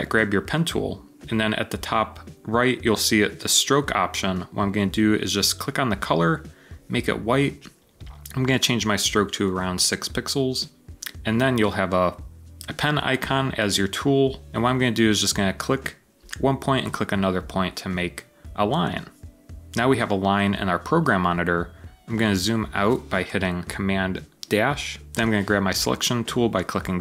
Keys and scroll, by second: 9.3 6, 9.6 Return, 22.3 super+-, 25.0 v.